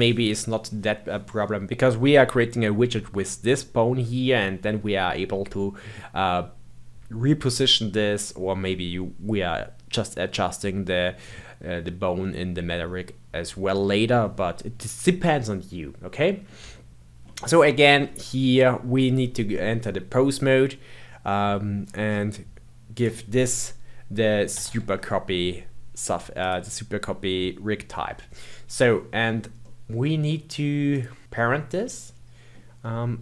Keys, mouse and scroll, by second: 15.4-18.4 middle drag, 18.4 Tab, 21.8-22.9 scroll down 11, 22.9-26.1 drag, 29.6-30.9 middle drag, 30.9 click, 31.3-33.2 middle drag.